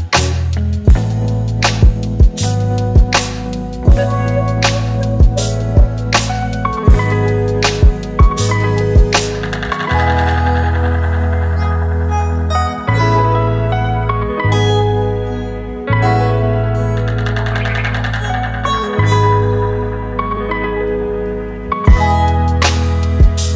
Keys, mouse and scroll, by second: 20.3 double click.